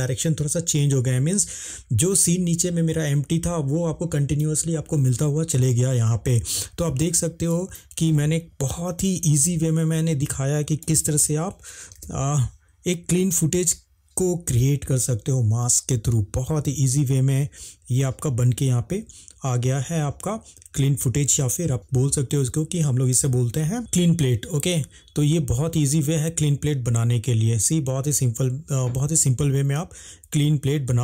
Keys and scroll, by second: 9.3 ctrl+Tab, 10.6 ctrl+Tab, 23.5 space.